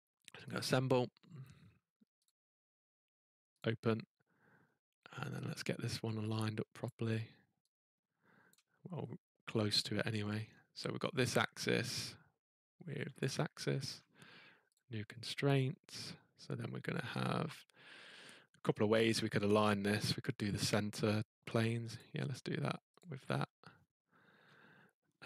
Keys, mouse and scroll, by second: 0.5 click, 2.2 click, 3.6 click, 4.6-5.5 scroll, 6.8 click, 8.5 click, 9.9 middle click, 10.3 middle click, 10.4 scroll, 11.3 click, 11.8 middle click, 11.9-12.2 scroll, 13.2 click, 13.6 middle click, 13.6-14.7 scroll, 14.7 click, 15.8 scroll, 17.1 scroll, 19.5 scroll, 22.0 click, 23.0 click, 23.7 middle click, 23.7 middle click, 23.8 middle click, 24.1 middle click.